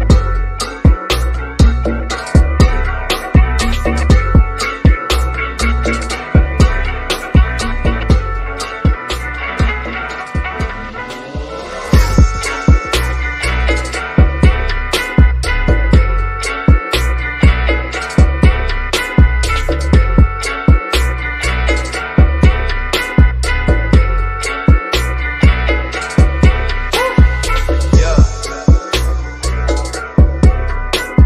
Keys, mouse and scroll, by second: 0.0 ctrl+l, 1.4-2.8 scroll down 1, 3.1-4.0 scroll down 1, 7.2 click, 10.8 shift+middle click, 11.1-11.6 scroll up 1, 11.8-13.2 shift+middle drag, 13.2-14.5 shift+middle drag, 14.5-15.2 scroll up 1, 15.6 shift+click, 17.4 scroll up 1, 18.6 click, 22.2 1, 23.2 Return, 25.7-26.2 scroll down 1, 26.5 shift+middle click, 27.5 scroll down 1, 28.2-29.6 middle drag, 29.6-30.2 scroll up 1, 31.0 click.